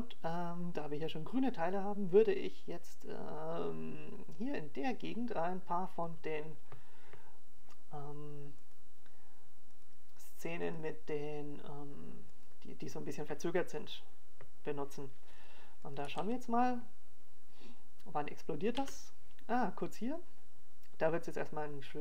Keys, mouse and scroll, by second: 14.0 click, 14.8 click, 19.5 click, 20.0 click, 20.3 alt+a.